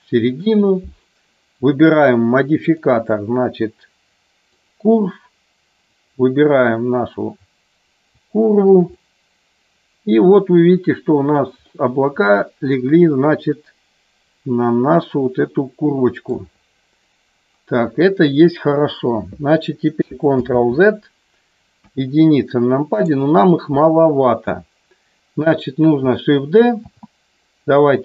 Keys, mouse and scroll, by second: 1.9 click, 2.5-4.6 drag, 5.9 click, 8.9-11.2 middle drag, 12.7-16.1 middle drag, 20.4 ctrl+z, 21.8 KP_1, 26.8 shift+d.